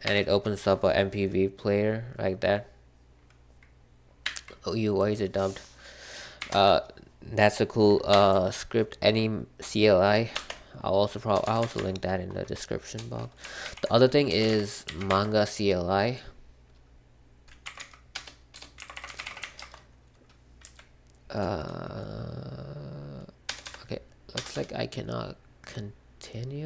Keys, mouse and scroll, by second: 0.0 Escape, 4.2 q, 6.3 typing, 6.4 Return, 8.1 Up, 10.3 BackSpace, 10.5 F12, 11.4-15.3 typing, 13.6 ctrl+l, 17.3-19.8 typing, 20.6 Up, 23.4 BackSpace, 23.6 BackSpace, 24.3 BackSpace, 24.5 BackSpace.